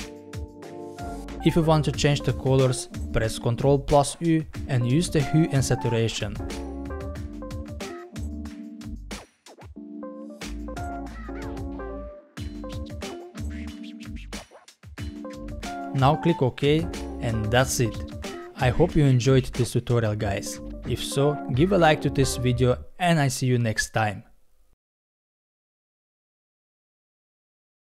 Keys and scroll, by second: 4.0 ctrl+u.